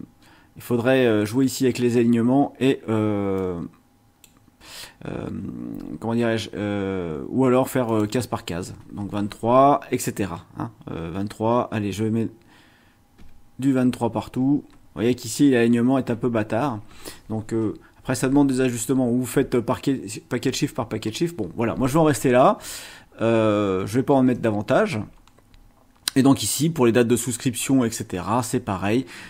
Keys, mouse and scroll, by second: 3.3-4.4 drag, 7.8 click, 8.8 space, 13.2 KP_2, 14.2 KP_3, 14.7 space, 14.8 BackSpace, 16.1 Right, 21.9 scroll down 2, 23.2 ctrl+scroll down 2, 24.0-24.5 ctrl+scroll down 3, 25.2 scroll up 2, 28.4 scroll down 2, 28.8-29.2 scroll up 2.